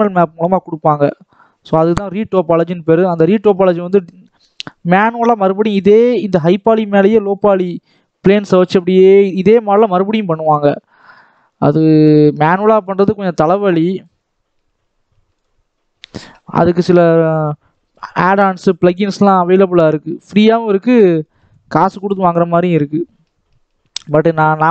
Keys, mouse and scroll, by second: 3.0 scroll down 2, 3.2 middle click, 3.6 scroll up 1, 3.8 shift+middle click, 4.2-5.8 shift+drag, 5.8-6.1 scroll down 2, 6.1 shift+middle click, 6.4-7.0 scroll up 2, 7.0-10.1 drag, 10.1-10.6 scroll down 1, 10.6 middle click, 11.4 scroll up 2, 11.6 middle click, 12.0-12.3 scroll up 1, 12.3-16.2 shift+drag, 16.2 middle click, 17.1 scroll up 1, 17.4 scroll down 1, 17.6 middle click, 18.0 scroll down 1, 18.2 shift+middle click, 18.4-19.0 scroll up 6, 19.0-19.8 scroll down 2, 19.8-24.7 drag.